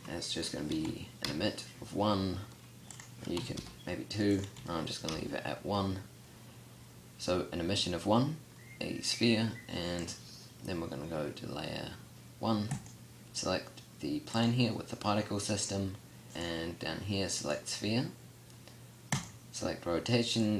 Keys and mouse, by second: 16.3 click.